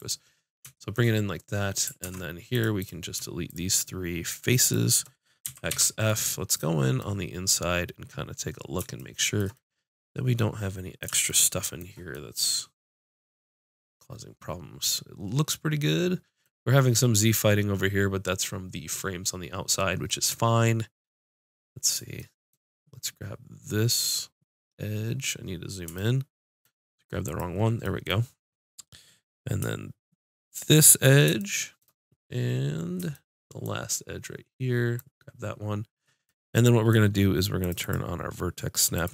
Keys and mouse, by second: 0.2-2.0 drag, 2.0 ctrl+Tab, 2.7-5.2 drag, 5.3-6.4 drag, 5.4 x, 15.8-20.2 middle drag, 23.8-25.6 drag, 27.2 click, 27.8-30.5 middle drag, 30.5-32.4 drag, 30.6 middle click, 31.4 middle click, 34.9 middle click, 35.1-36.2 drag, 37.6-39.1 drag.